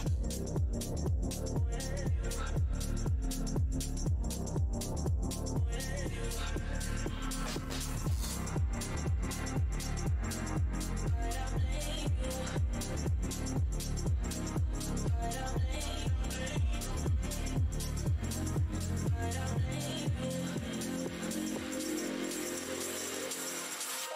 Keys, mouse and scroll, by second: 1.1 right click, 1.3 click, 2.2 right click, 3.6 d, 4.1 space, 4.7 alt+scroll up 2, 5.1 r, 7.6 z, 8.8 1, 8.9 Return, 10.3 alt+w, 11.9 `, 13.2 space, 14.2 alt+click, 15.0 alt+r, 16.4 alt+r, 16.4 z, 16.6 z, 17.4 Tab, 17.7-19.0 typing, 19.3 Return, 20.7 Return, 20.9 5, 21.0 Return, 22.2 alt+scroll down 1, 22.8 alt+w, 22.8-23.2 scroll down 1.